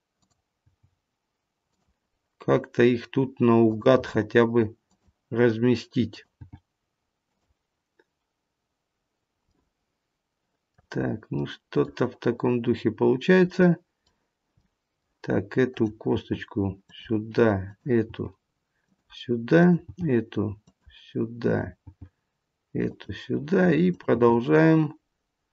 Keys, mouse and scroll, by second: 0.0 click, 0.7 g, 3.6 click, 4.2 g, 6.0 click, 6.6 g, 9.4 middle click, 11.0 scroll up 2, 11.3 middle click, 13.5 middle click, 14.5 middle click, 15.7 click, 16.2 g, 17.6 click, 18.1 g, 19.5 click, 20.1 g, 21.3 click, 21.9 g, 23.8 click, 24.4 g.